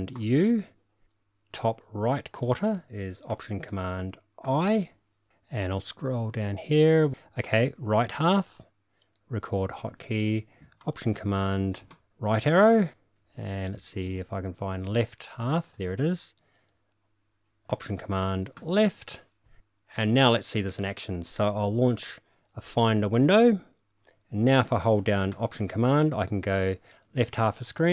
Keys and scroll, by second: 0.1 alt+super+u, 4.4 alt+super+i, 11.9 alt+super+Right, 18.5 alt+super+Left, 21.9 super+e, 26.5 alt+super+Left.